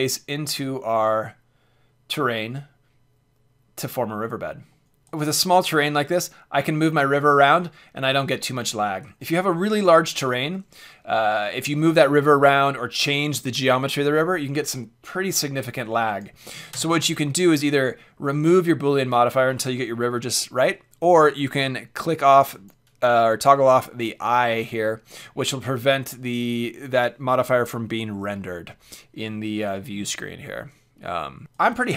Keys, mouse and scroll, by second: 4.8-7.9 drag, 9.2-16.1 middle drag, 16.1-17.8 drag, 22.5-24.5 drag, 31.5-31.9 drag, 31.7 h.